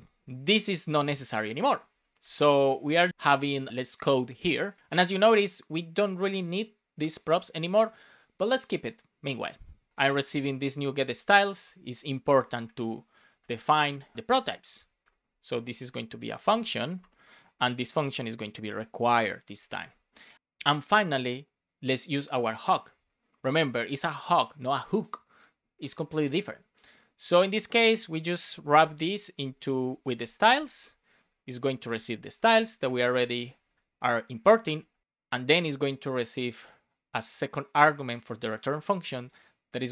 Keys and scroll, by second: 1.3 BackSpace, 1.8 Down, 2.1 BackSpace, 9.9 Return, 11.0 shift+s, 11.5 Return, 12.3 shift+;, 12.5 space, 14.5 Down, 14.9 Return, 15.5 Return, 16.9 Return, 18.5 Return, 30.0 shift+s, 30.8 shift+9, 31.1 shift+0, 31.6 Left, 32.2 Left, 32.8 BackSpace, 33.5 Right.